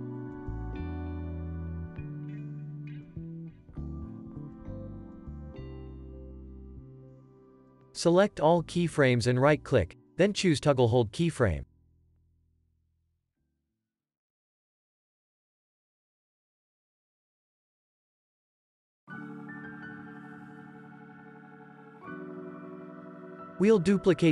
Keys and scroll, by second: 11.4 ctrl+s, 16.2 alt+x, 17.5 ctrl+c, 18.3 alt+z, 18.7 ctrl+v, 19.0 ctrl+s, 19.5 v, 20.4 space.